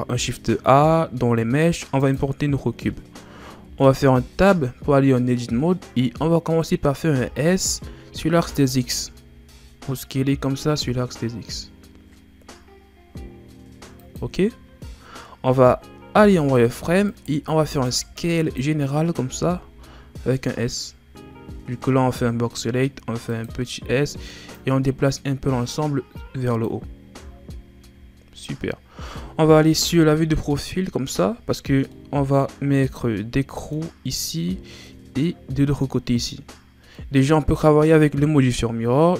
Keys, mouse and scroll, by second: 3.6 Tab, 7.1 s, 16.1 z, 17.1 right click, 17.6 b, 19.2 s, 24.5-27.5 drag, 27.5-28.2 scroll up 1, 29.7 z, 31.6 scroll down 3, 31.9-39.1 middle drag.